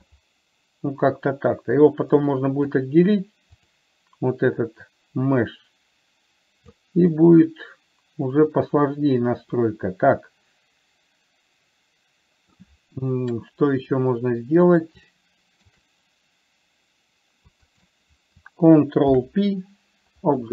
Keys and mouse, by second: 2.2 click, 5.3-7.2 drag, 7.5-8.8 middle drag, 9.9-12.9 middle drag, 15.4-16.0 shift+middle drag, 18.0 shift+click, 19.3 ctrl+p.